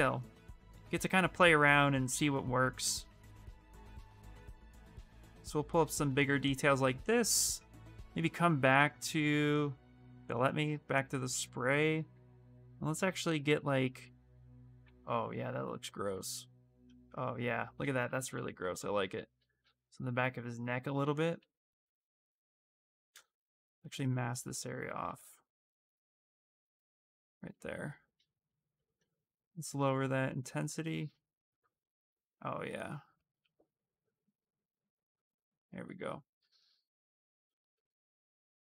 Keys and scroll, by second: 15.3 s, 16.9 space, 21.1 ctrl+z, 22.9 ctrl+z, 28.7 space.